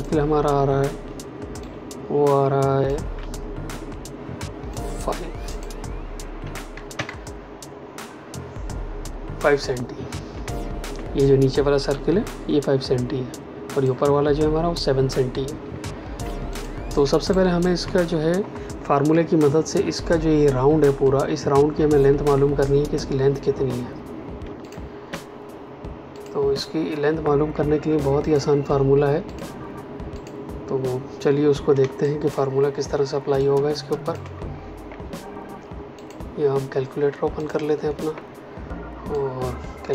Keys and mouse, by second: 0.4 v, 1.6 click, 4.7 click, 6.4 KP_5, 6.9 KP_Enter, 10.4 space, 13.7 click, 15.6 space, 16.4 ctrl+alt+click, 17.2 click, 24.6 shift+click, 26.1 click, 27.5 x, 28.2 click, 31.7 space, 32.0 click, 32.2 space, 32.8 ctrl+space, 33.3 ctrl+click, 35.9 click.